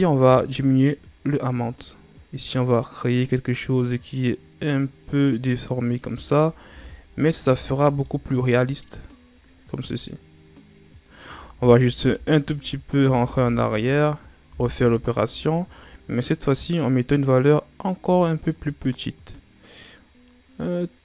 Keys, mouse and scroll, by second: 0.1-3.1 drag, 6.6 Tab, 7.4 a, 7.7-8.0 scroll down 2, 8.0-11.0 middle drag, 11.5 ctrl+z, 11.8 ctrl+z, 12.7-13.1 scroll up 2, 13.1 ctrl+z, 14.4 w, 17.9-21.0 shift+drag.